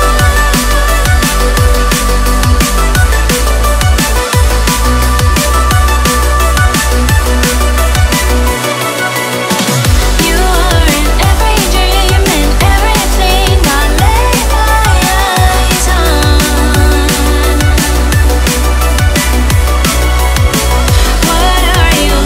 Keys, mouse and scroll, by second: 0.2-3.2 typing, 4.9 s, 6.3 g, 8.7 click, 9.1 s, 10.3 s, 11.9 g, 13.5 r, 14.5 g, 16.6 click, 17.4 s, 18.6 g, 20.0 r, 20.8 g.